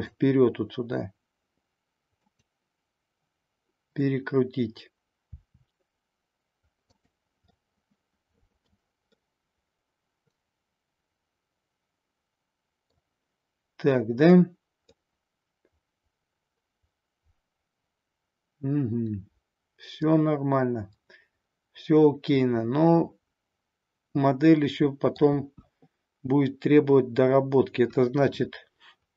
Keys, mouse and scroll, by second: 5.3 r, 6.9 click, 7.5-8.7 middle drag, 9.0-12.9 middle drag, 14.9-25.2 middle drag, 25.4 KP_1.